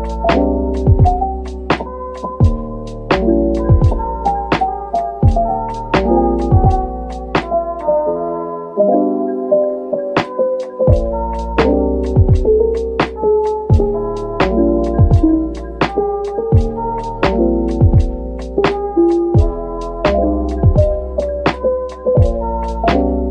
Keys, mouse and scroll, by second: 2.3 double click, 4.2-8.6 typing, 6.2 Return, 11.1 middle click, 13.5-13.9 typing, 17.0 typing, 18.6-19.5 typing, 21.0 typing, 22.8 typing.